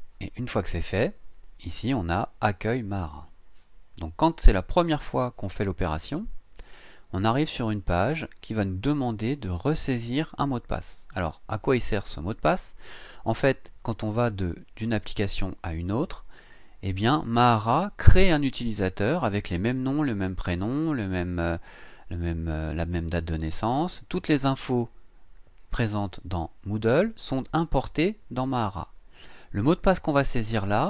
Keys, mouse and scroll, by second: 4.8 click, 30.0 click.